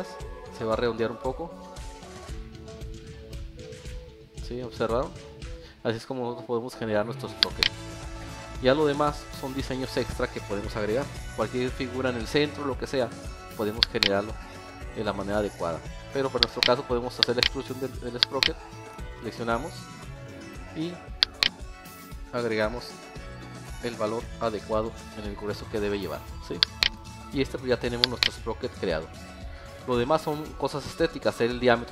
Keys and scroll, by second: 8.3 alt+F1, 11.3 alt+7, 13.6 Escape, 15.8 Escape, 29.1 alt+s, 30.7 alt+s.